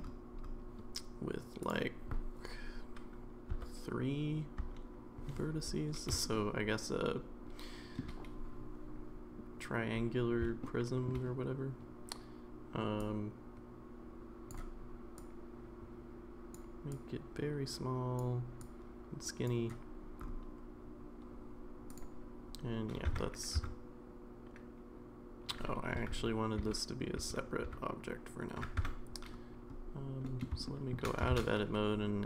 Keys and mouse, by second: 1.7-5.6 drag, 6.3-8.0 shift+middle drag, 10.6 shift+middle click, 13.0-14.5 drag, 15.3-16.5 drag, 17.0-18.2 drag, 18.7 click, 21.9 click, 23.1 Tab, 23.6 Tab, 26.1 ctrl+z, 26.6 ctrl+z, 27.7 ctrl+z, 28.8 Tab, 30.3 middle click, 30.6 shift+middle drag, 31.3 shift+a.